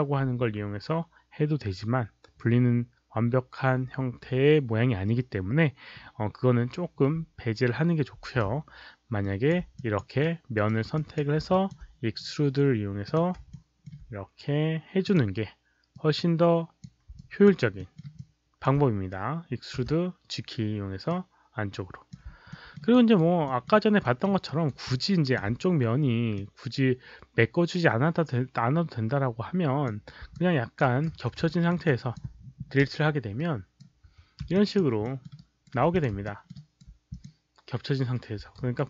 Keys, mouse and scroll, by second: 9.2 alt+drag, 9.7 drag, 10.2-10.6 right drag, 10.9 drag, 11.6 alt+click, 11.6 right click, 13.0 click, 13.6 alt+middle click, 13.6 right click, 15.0 click, 15.9 click, 16.8 alt+middle click, 16.8 right click, 17.2 alt+click, 17.7 alt+middle click, 18.1 alt+click, 19.8 g, 21.1-22.1 drag, 22.5 alt+middle click, 22.9 alt+right click, 23.4 alt+middle click, 24.0 alt+middle click, 24.4 alt+right click, 24.9 alt+click, 26.3-29.8 drag, 30.3 alt+click, 30.8 alt+right click, 31.1 4, 31.4 alt+middle click, 31.8 alt+click, 32.8 Delete, 33.3-33.8 right drag, 34.0 5, 34.6 alt+click, 35.0 alt+middle click, 35.3 alt+right click, 35.9 click, 36.2 alt+middle click, 36.5 alt+right click, 37.1 click, 38.5 right click.